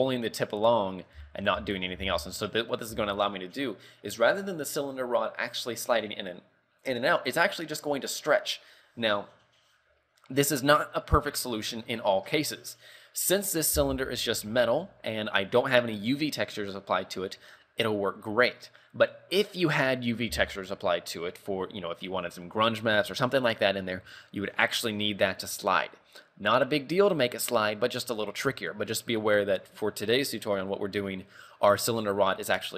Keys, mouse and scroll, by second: 1.0 scroll up 4, 1.3 z, 1.8 shift+middle click, 2.1 z, 3.1 z, 3.1-3.8 scroll down 3.